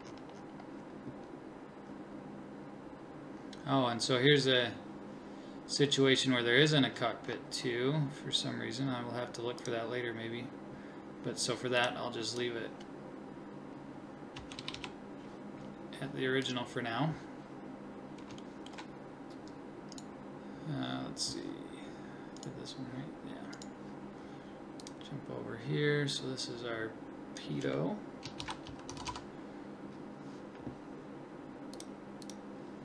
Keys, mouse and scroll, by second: 9.6-11.8 right drag, 18.5-22.4 middle drag, 29.1 t.